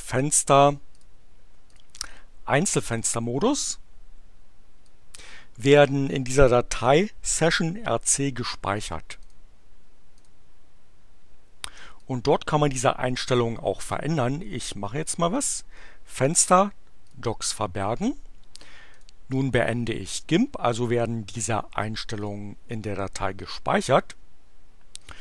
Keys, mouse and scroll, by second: 0.9 click, 1.7 click, 2.9 click, 4.7-6.3 drag, 9.2 click, 10.1 click, 12.0-13.7 drag, 15.3 click, 17.0 click, 18.9 click, 22.2 click, 24.9-25.2 drag.